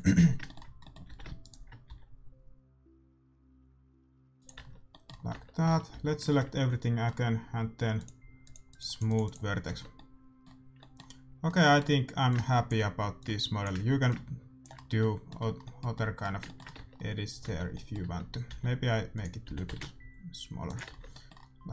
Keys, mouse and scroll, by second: 0.8-2.4 middle drag, 1.0 a, 1.3-3.0 right drag, 1.8 s, 4.5 Tab, 4.6 middle click, 5.2 Tab, 5.6 a, 5.9 a, 7.9-10.9 drag, 9.6 Tab, 9.9-10.9 middle drag, 10.9 click, 10.9-13.6 middle drag, 12.2-16.0 drag, 14.7-18.4 middle drag, 16.7 Tab, 17.4 Tab, 18.0 Tab, 18.4 s, 19.4 g, 20.8 Tab.